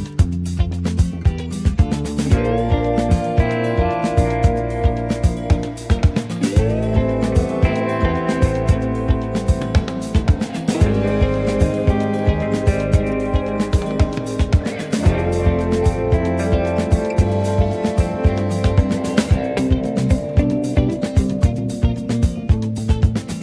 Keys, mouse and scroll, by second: 0.0 middle click, 0.2-0.5 scroll up 2, 0.5 space, 1.3 click, 3.1 click, 3.5 click, 6.1-6.5 scroll down 2, 6.5 middle click, 7.1 click, 7.6 Tab, 8.0 middle click, 8.5 click, 9.5 ctrl+z, 9.7 click, 11.0 middle click, 11.2 g, 12.9 click, 13.5 click, 14.0 g, 17.3 click, 18.5 ctrl+z, 18.7 click, 19.3 scroll down 1, 19.5 middle click, 20.3-20.6 scroll down 1, 20.6 middle click, 20.8-22.2 scroll up 1, 22.2 g.